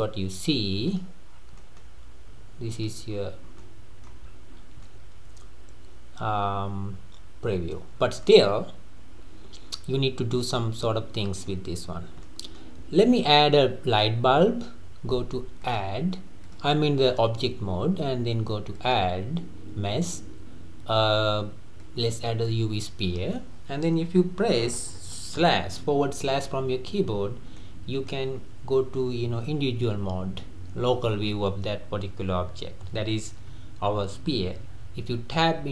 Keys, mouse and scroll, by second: 0.9 click, 1.3 scroll down 2, 1.6-2.9 middle drag, 2.9 click, 3.1-3.6 scroll up 4, 3.6-4.2 middle drag, 4.2-4.6 scroll up 3, 4.6 scroll down 3, 4.8-7.9 middle drag, 8.0 scroll down 2, 8.3-11.3 middle drag, 11.9 scroll up 1, 11.9-12.3 scroll down 2, 12.3-13.1 middle drag, 13.1-13.6 scroll down 3, 13.6-15.6 middle drag, 15.6 click, 18.8-21.8 drag, 26.1 /, 27.1-27.6 scroll down 2, 27.6-30.7 middle drag, 31.5-32.2 scroll down 1, 32.2-32.9 scroll down 1, 32.9-33.5 scroll down 1, 33.5-34.6 scroll down 1, 35.2 Tab.